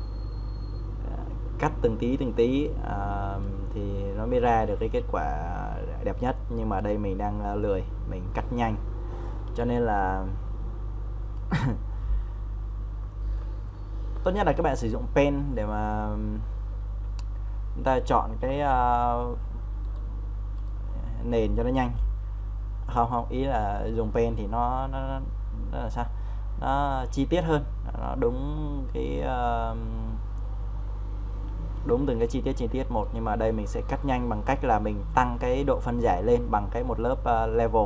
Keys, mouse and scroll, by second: 13.4 ctrl+alt+shift+-, 14.7 click, 18.5 ctrl+z, 19.9 right click, 20.5-37.8 drag.